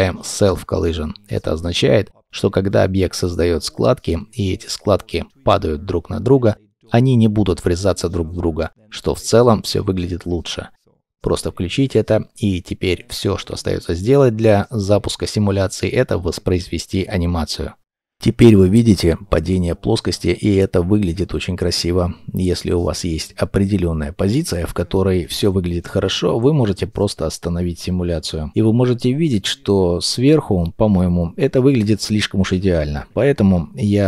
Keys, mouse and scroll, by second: 22.6 middle click, 27.9 middle click.